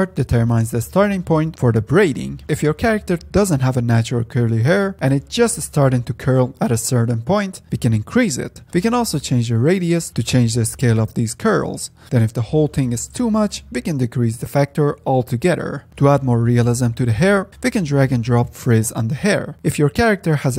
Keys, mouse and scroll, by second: 2.1-8.2 drag, 9.3-12.7 drag, 12.8-13.3 scroll down 2, 13.4 middle drag, 13.6-14.1 scroll down 3, 14.1 middle click, 14.4-15.9 drag, 15.9-17.6 middle drag, 17.6 F10, 18.0 click, 18.6-19.7 drag.